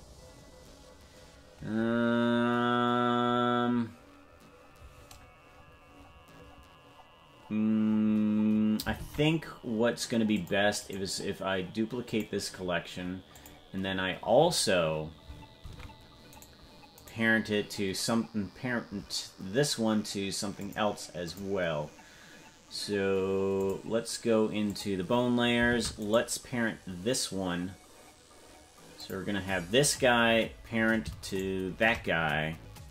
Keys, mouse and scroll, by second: 9.0 ctrl+Tab, 10.3 click, 10.7-12.2 right drag, 13.3 click, 15.6 ctrl+Tab, 17.0 right click, 20.6 click, 21.2 click, 23.5 click, 24.7 click, 25.7 ctrl+Tab, 26.1 right click, 28.9 click, 31.3 shift+right click.